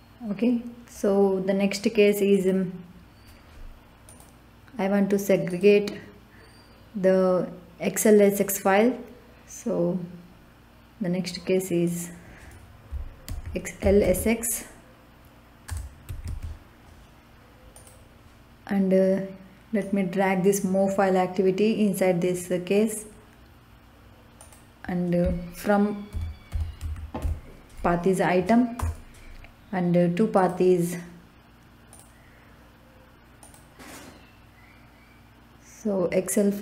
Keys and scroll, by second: 13.2-14.5 typing, 15.6-16.7 typing, 25.8-27.7 typing, 28.7 Return.